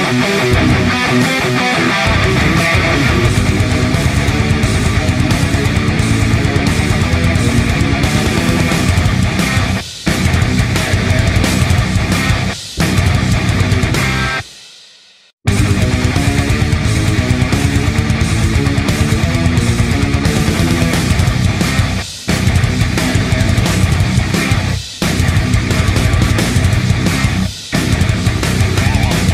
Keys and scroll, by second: 3.7 v, 7.0-20.5 typing, 9.2 ctrl+space, 21.1 Escape, 23.6 Delete, 24.6 space, 27.1-28.4 typing, 28.1 ctrl+space.